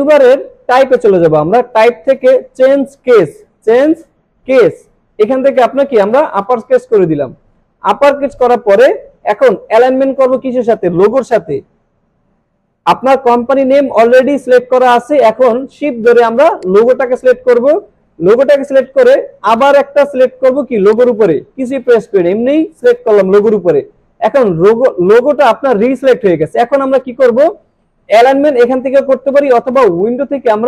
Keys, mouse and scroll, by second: 0.7 click, 6.1 click, 8.7 alt+Num_Lock, 8.7 click, 9.0-9.3 alt+scroll up 1, 16.0 shift+Num_Lock, 16.0 alt+scroll up 1, 16.6 shift+click, 20.9 click, 29.8 click.